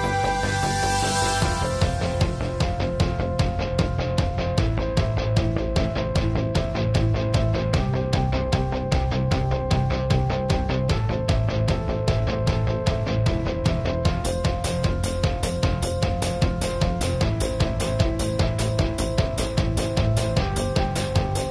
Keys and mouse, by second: 0.2-1.4 middle drag, 1.2 [, 1.4-3.0 drag, 1.4 [, 3.0-5.0 middle drag, 6.0 middle click, 6.2-13.2 drag, 13.2 middle click, 13.5 right drag, 13.7-16.2 drag, 14.6 ], 14.7 ], 15.1 ], 15.9 ], 16.2 middle click, 16.6 click, 16.6 right click, 17.5 middle click, 17.9-19.0 drag, 17.9 right click, 19.0-20.7 middle drag, 21.0 click, 21.0 right click, 21.1 middle click, 21.2 click.